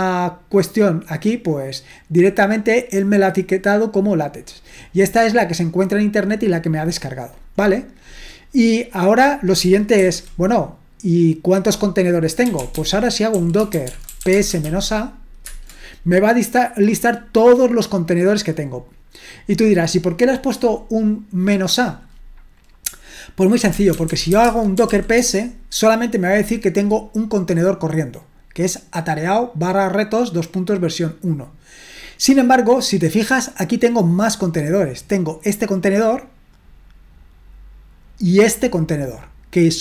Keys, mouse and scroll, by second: 8.6-9.1 scroll down 1, 9.1 click, 10.0 ctrl+l, 12.2-15.5 typing, 23.3-25.4 typing, 28.6-32.8 drag, 35.8-39.8 drag.